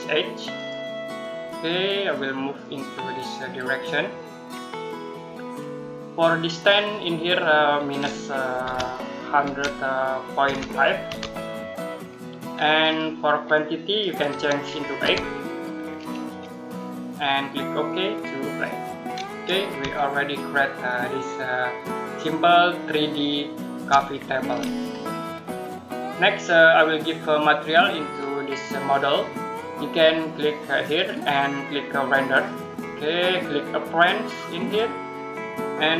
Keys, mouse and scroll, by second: 8.5 typing, 10.0-10.9 typing, 13.4 click, 14.9 8, 16.1 click, 19.3 middle click, 19.8 shift+middle click, 24.0-24.3 scroll down 1, 24.3-25.2 scroll up 1, 25.2 middle click, 30.6 click.